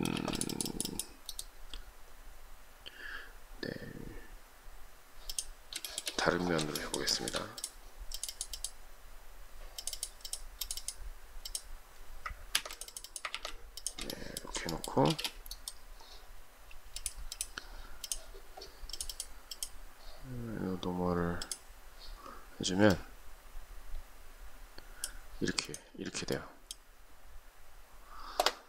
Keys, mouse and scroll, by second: 0.0 space, 5.7 shift+middle click, 6.6 shift+middle click, 6.9 shift+middle click, 12.4 ctrl+c, 13.2 ctrl+v, 13.9 shift+middle click, 14.9 space.